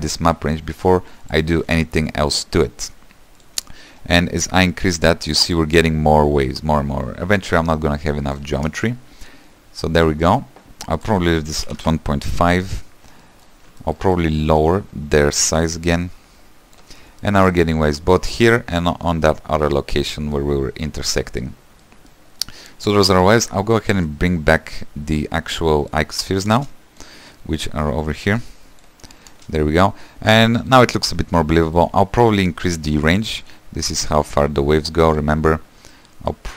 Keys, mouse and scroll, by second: 1.6 shift+d, 3.4-7.3 drag, 8.7 space, 11.0-13.2 drag, 13.2-15.3 middle drag, 15.3-17.2 shift+drag, 17.2 middle click, 17.9 scroll down 2, 18.2-22.9 middle drag, 22.9-23.3 scroll down 3, 23.3 shift+middle click, 23.7-24.1 scroll down 3, 24.1 shift+middle click, 24.5-25.2 scroll down 2, 25.2 click, 26.5 space, 28.9 click, 29.3 space, 30.1-32.1 middle drag, 32.1-33.5 scroll up 15, 33.5-35.6 shift+drag, 35.6-36.0 scroll down 3, 36.0 shift+middle click.